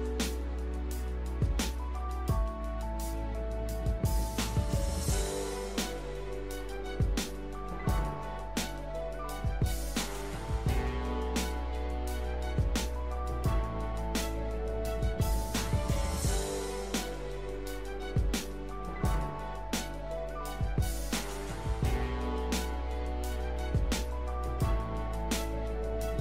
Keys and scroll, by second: 0.0 l, 9.5 l, 25.9 l.